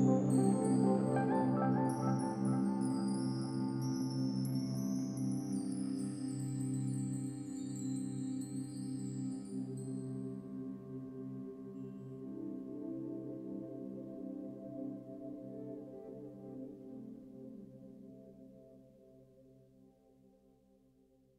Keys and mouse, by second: 0.3 Delete, 1.0 Delete, 1.9-3.8 typing, 6.1-6.8 typing, 8.1-9.5 typing, 12.7 typing, 14.7 click, 15.0 click, 16.2-16.9 typing, 17.1 alt+click.